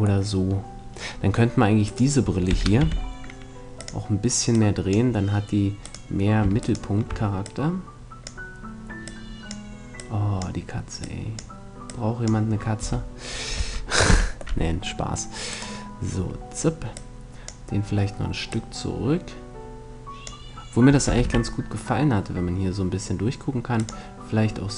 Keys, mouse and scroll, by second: 0.5-1.7 middle drag, 1.7-3.3 right drag, 2.1 r, 3.5-6.1 drag, 5.7-9.9 right drag, 7.1-13.3 drag, 12.5 a, 14.3 middle click, 14.3 z, 15.3-17.1 right drag, 16.5-19.9 drag, 19.9 middle click, 20.7 r, 23.5-24.7 drag.